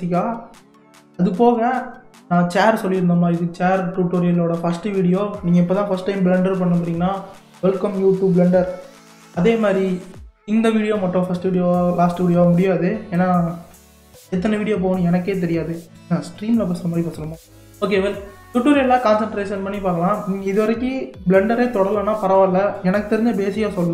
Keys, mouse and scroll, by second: 0.7-2.3 scroll up 1.